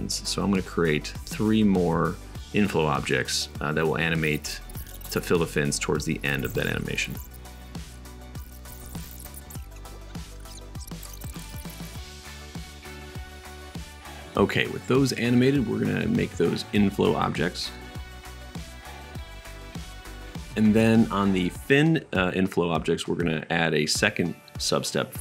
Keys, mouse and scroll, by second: 2.4-2.8 right drag, 2.9 shift+a, 3.9 s, 4.4 g, 4.6 s, 5.2 click, 5.4-8.4 middle drag, 8.4 click, 8.5 shift+middle click, 9.1 click, 9.8 middle click, 10.1-11.7 shift+drag, 10.2 shift+d, 10.7-15.3 middle drag, 10.7 right click, 11.2 shift+d, 11.7-18.8 drag, 11.7-15.3 right drag, 15.9-18.8 middle drag, 15.9-18.8 right drag, 19.2-20.5 middle drag, 20.9-22.2 middle drag, 22.5 middle click.